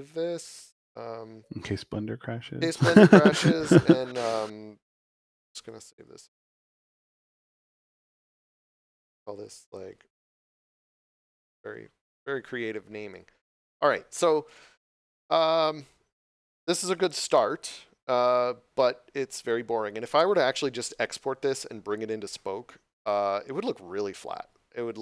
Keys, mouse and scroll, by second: 5.2 t, 6.1 Return, 7.5 click, 10.1 shift+r, 10.1 o, 10.7 Return.